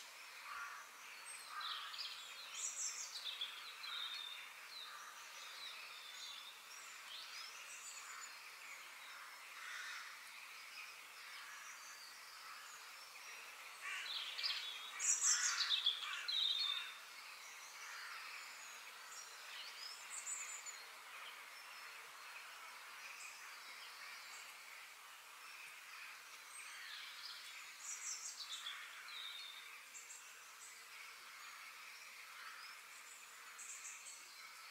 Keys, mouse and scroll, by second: 0.4 g, 7.2-8.2 middle drag, 8.2 KP_3, 9.0-12.0 middle drag, 12.4 ctrl+z, 12.7 f, 15.9-17.8 middle drag, 21.6-23.5 middle drag, 29.2-31.2 middle drag, 32.2-34.7 middle drag.